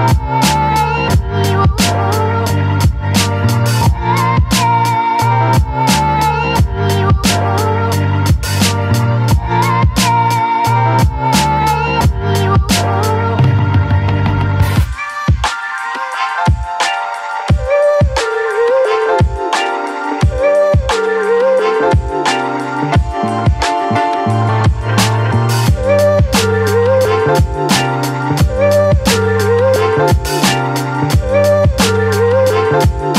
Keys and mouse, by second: 1.2 ctrl+z, 2.2 click, 2.6-6.5 drag, 7.5 click, 8.6-10.3 drag, 10.7 a, 11.9 middle click, 12.2 middle click, 13.4-14.4 ctrl+z, 14.6 middle click, 15.0 middle click, 15.6 shift+middle click, 16.0 middle click, 16.8 middle click, 17.8 ctrl+i, 18.2 b, 19.4 click, 20.0 ctrl+z, 20.8-21.8 drag, 22.2 click, 22.7 ctrl+z, 23.7 click, 24.1 click, 25.0 a, 27.9 ctrl+z, 29.3 click, 29.9 click.